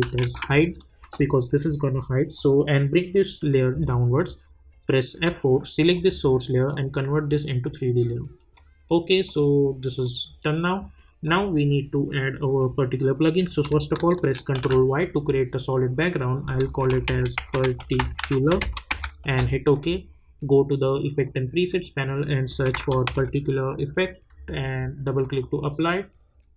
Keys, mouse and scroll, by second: 0.0-0.9 typing, 1.0 Return, 2.3-5.1 drag, 5.1 F4, 5.9 click, 14.5 ctrl+y, 16.6-19.4 typing, 22.4-23.5 typing, 25.2 click.